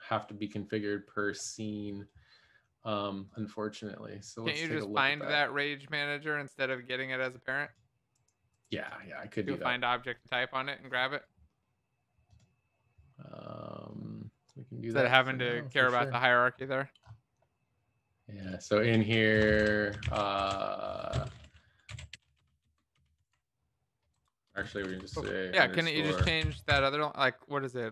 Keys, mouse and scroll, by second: 19.5 Return, 19.6 Up, 20.3 ctrl+s, 20.3 Tab, 21.9-23.2 typing, 24.3-27.2 typing.